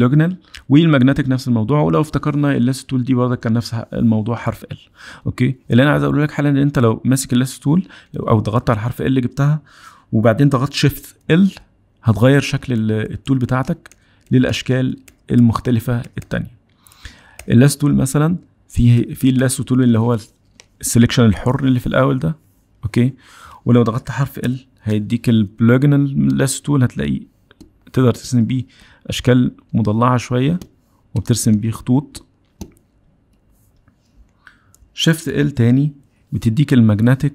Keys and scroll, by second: 11.5 shift+l, 12.7-17.3 typing, 19.0 shift+l, 19.4 shift+l, 24.4 shift+l, 35.0 shift+l.